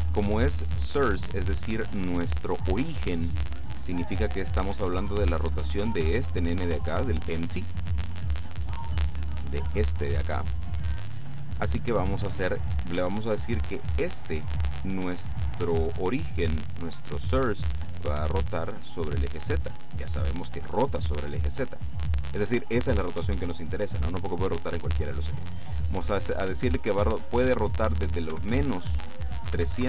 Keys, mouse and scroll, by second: 9.5 right click, 11.0 right click, 18.6 click, 28.4 KP_Subtract, 29.5 KP_3, 29.7 KP_6.